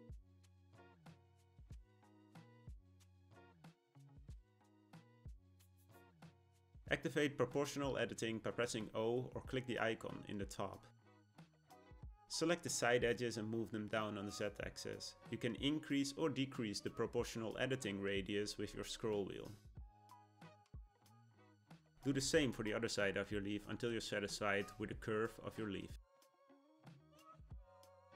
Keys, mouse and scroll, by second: 1.9 click, 2.3-5.2 middle drag, 5.2 1, 5.7-9.1 shift+middle drag, 10.0 click, 12.2 click, 13.5 g, 20.0 click, 20.8 g, 23.6-24.7 middle drag, 24.7 click, 25.0 g, 27.0 click, 27.5 click, 27.9 g.